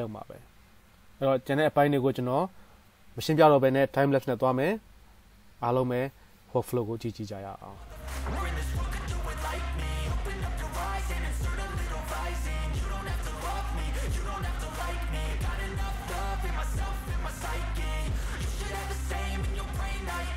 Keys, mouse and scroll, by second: 8.4 middle click, 10.9-11.9 drag, 10.9 middle click, 10.9 right click, 11.9-13.2 right drag, 12.2 click, 12.2 middle click, 13.2-13.6 middle drag, 17.3 shift+middle click, 19.2 middle click, 19.9 shift+right click, 20.3 middle click.